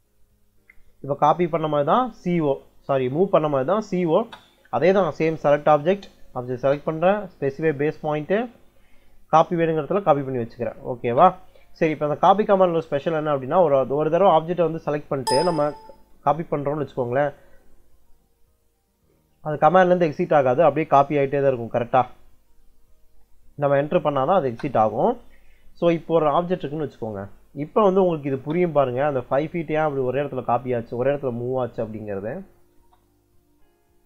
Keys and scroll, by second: 2.1 c, 4.0 space, 6.5 space, 10.9 space, 15.1 space, 24.4 space, 28.1 l, 28.3 space, 32.6 space.